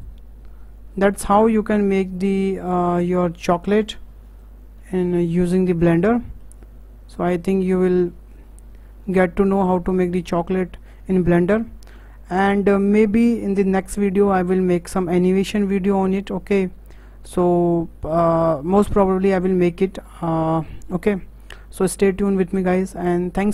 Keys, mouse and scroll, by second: 2.1 click, 2.7 KP_0, 3.7 click, 4.0-4.4 scroll up 5, 4.9 scroll down 1, 5.2-8.7 shift+middle drag, 9.3-10.4 shift+middle drag, 10.4 KP_0.